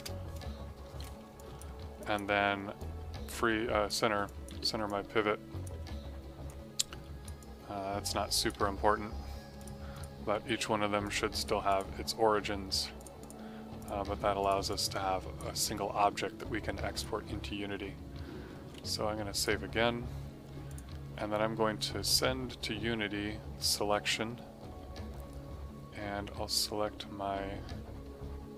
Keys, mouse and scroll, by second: 0.0-0.2 typing, 0.8 F2, 1.3 alt+click, 1.9 alt+click, 4.2 click, 4.5 w, 4.8 click, 5.7 d, 6.4 click, 7.3 click, 8.6 w, 9.5 click, 13.3 click, 14.6 click, 15.5 click, 18.6 s, 19.3 click, 23.5 click.